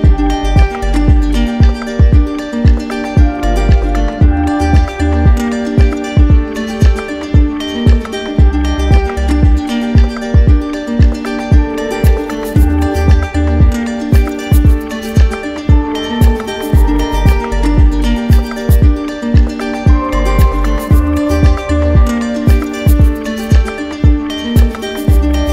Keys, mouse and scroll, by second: 2.0 click, 2.6 ctrl+z, 6.9 click, 8.9 shift+click, 10.4 shift+click, 10.9 ctrl+z, 11.3 ctrl+z, 11.9 ctrl+z, 15.8 click, 17.8 shift+click, 21.0 shift+click, 22.3 shift+click, 23.0 shift+click, 23.3 shift+click, 25.0 shift+click.